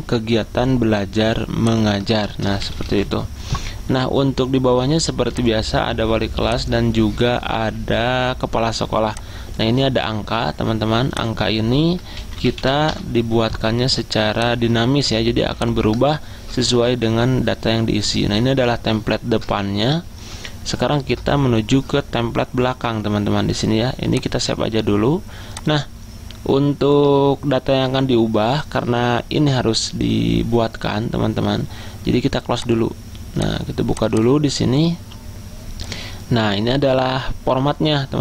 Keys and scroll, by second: 2.4-3.6 typing, 11.9-13.2 typing.